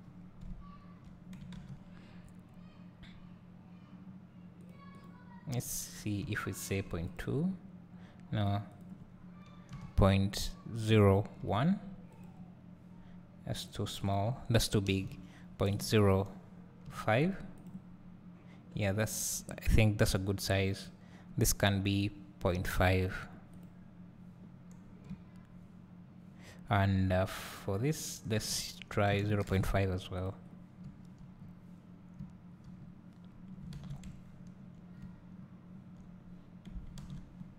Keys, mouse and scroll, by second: 7.0 click, 12.1 click, 17.5 click, 17.5 BackSpace, 23.5 click, 24.9 scroll down 1, 25.0 `, 30.1 click, 30.8 `, 31.3 scroll up 2, 32.1 `, 32.3-34.3 middle drag, 32.7-34.1 scroll down 2, 34.1 `, 35.3-35.8 middle drag, 36.2 scroll up 2.